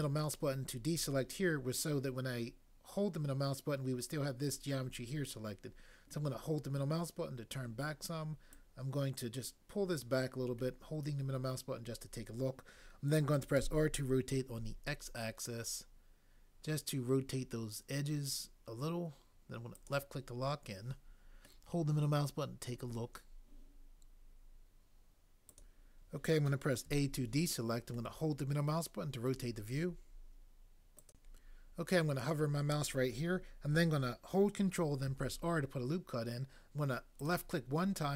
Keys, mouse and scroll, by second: 13.6 r, 14.6 x, 26.8 a, 35.0 ctrl+r.